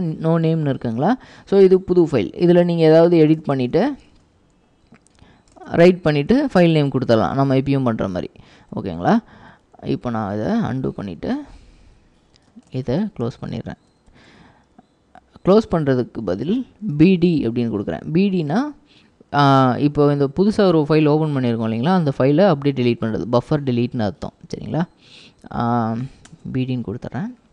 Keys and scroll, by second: 2.8-10.2 typing, 11.2-14.3 typing, 16.7-17.5 typing, 26.4 Return.